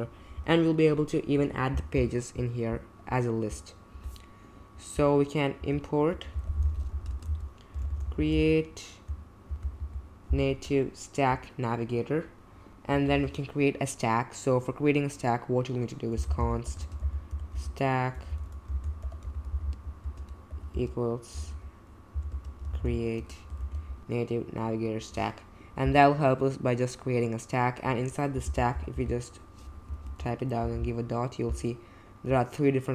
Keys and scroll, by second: 5.6 Return, 6.0-9.8 typing, 10.4 Return, 12.9 Return, 13.1 Return, 15.9-24.1 typing, 28.2-29.4 typing, 29.8 Down, 30.0 Return, 30.6 ..